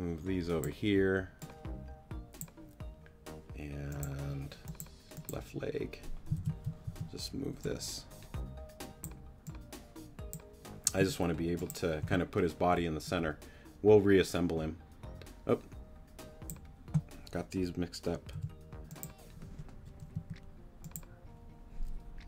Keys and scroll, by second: 6.4 super+a, 6.8 super+t, 7.5 t, 12.0 t, 18.3 b, 20.1 p.